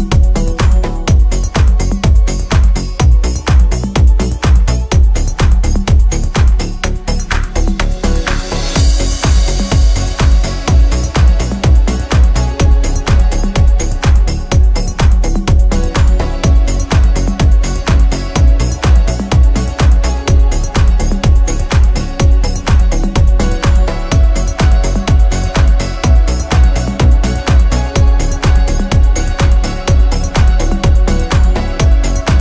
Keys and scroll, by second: 1.7 0, 2.0 6, 2.1 Return, 4.7-6.1 typing, 7.5 =, 9.5 =, 10.3 space, 11.2 p, 12.3-13.5 typing, 16.2-18.8 typing, 18.5 Return, 21.0 f, 22.6 space, 25.4 p, 30.1 space, 31.2 m.